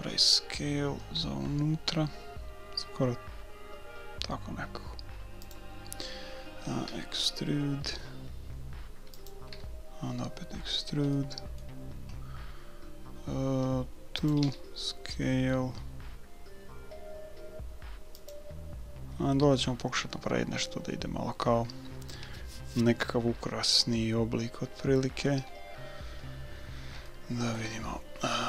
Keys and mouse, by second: 6.9 e, 9.5 e, 14.5 s, 18.7-20.7 middle drag, 26.2-28.4 middle drag.